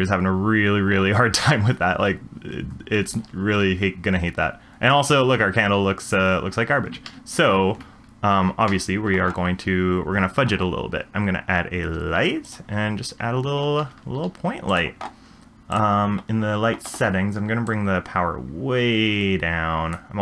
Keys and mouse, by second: 7.2 ctrl+z, 8.7 ctrl+z, 11.1 shift+a, 13.9 g, 17.7-19.9 drag.